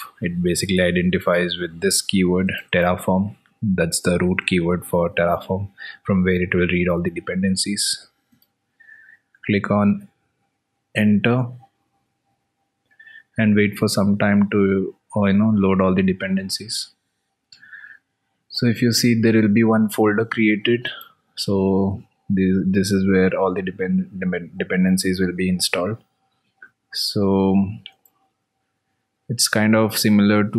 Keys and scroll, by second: 26.7 alt+Tab.